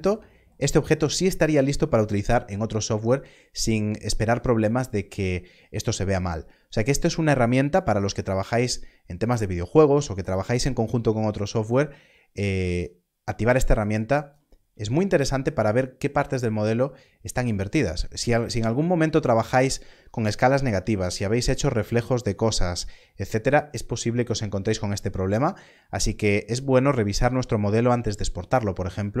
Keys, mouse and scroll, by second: 6.9 click, 12.7 click.